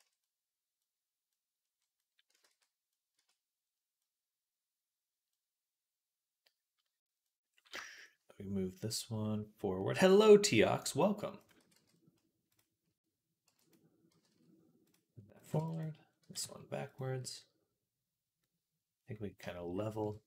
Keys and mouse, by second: 0.1-11.3 drag, 2.3 ctrl+s, 3.0 Tab, 11.3-18.2 middle drag, 11.4 x, 13.3 b, 13.9 g, 15.4 b, 16.0 g, 18.3-19.8 middle drag, 19.8 KP_3.